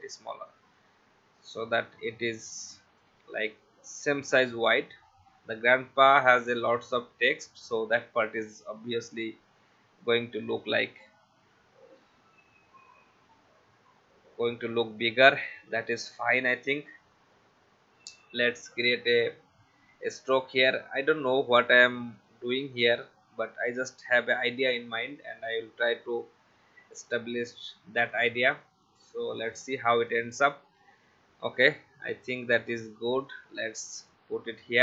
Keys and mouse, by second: 2.4 shift+click, 6.7 click, 11.4 Left, 16.5 click, 18.1 click, 21.0 click, 22.2 shift+click, 22.7 shift+v, 23.8 click, 24.1 shift+x, 28.1 click, 32.4 click, 34.0 Up.